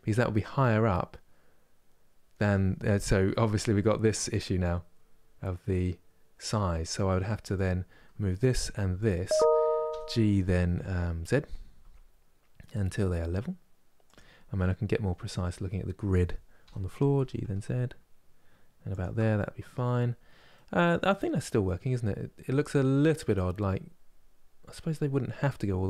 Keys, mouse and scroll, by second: 2.9 KP_1, 7.2-9.5 drag, 9.5 g, 14.0 scroll up 3, 16.3 g, 19.0 middle click, 19.7 scroll down 2, 20.2 middle click, 20.7 scroll down 1, 21.1-25.8 middle drag.